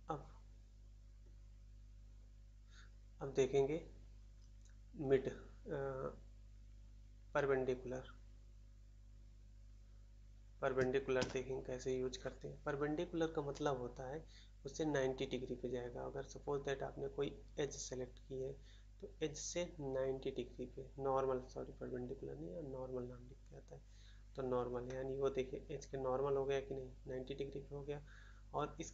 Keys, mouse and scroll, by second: 11.1 shift+a, 24.8 middle click, 24.8-25.4 scroll up 1, 25.4 middle click, 25.7 middle click.